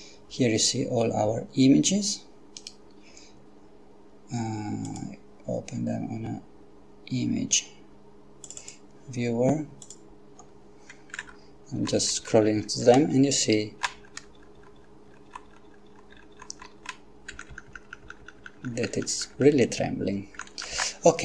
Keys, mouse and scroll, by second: 2.6 right click, 4.9 click, 8.5 click, 9.8 click, 11.9 Down, 12.1 Down, 12.3 Down, 17.4 Up, 17.6 Up, 17.8 Up.